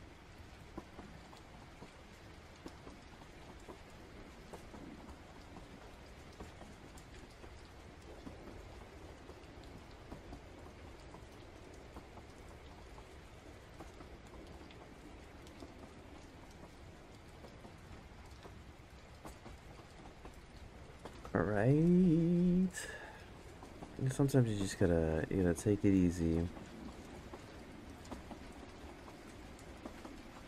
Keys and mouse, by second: 1.3 click, 2.2 ctrl+z, 2.5-3.9 drag, 5.1 click, 6.2 ctrl+z, 6.6-7.8 drag, 8.8 ctrl+z, 9.0 ctrl+z, 9.5 click, 10.6 ctrl+z, 11.0-13.9 drag, 15.3 click, 17.4 click, 22.1 click, 24.3 click, 26.8 click, 27.5 ctrl+z, 27.7 click, 29.3 click.